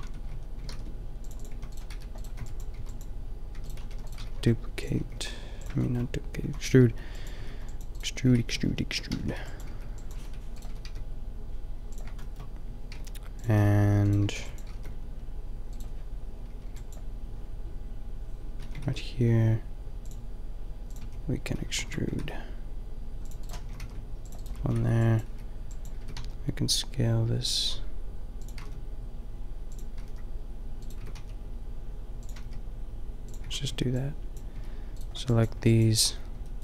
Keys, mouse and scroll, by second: 0.0 Tab, 0.4 a, 0.7 ctrl+r, 1.5-5.0 typing, 4.9-6.9 drag, 6.5 a, 7.1 b, 7.4 g, 8.5 ctrl+z, 8.7 ctrl+z, 9.1-10.7 typing, 12.9-14.7 typing, 15.3-17.5 drag, 16.6 b, 18.7 a, 18.9 ctrl+r, 21.0 a, 21.6 ctrl+z, 21.7 ctrl+z, 22.3 ctrl+r, 23.7-26.0 typing, 23.9 ctrl+r, 28.5 g, 29.9 g, 31.0 s, 31.6 click, 32.3 g, 33.5-36.1 typing.